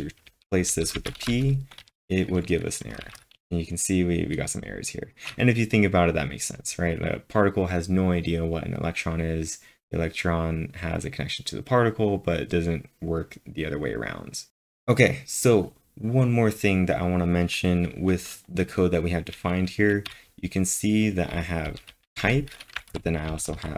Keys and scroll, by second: 0.0-1.8 typing, 2.9-3.9 typing, 20.1-22.9 typing.